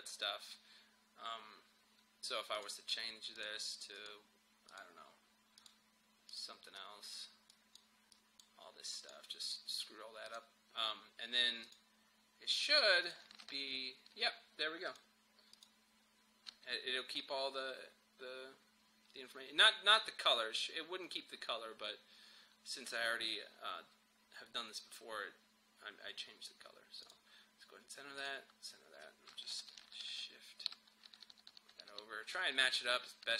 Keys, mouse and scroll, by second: 2.6 click, 13.5 ctrl+v, 14.9 click, 27.0 click, 29.6 shift+Right, 31.0 Right.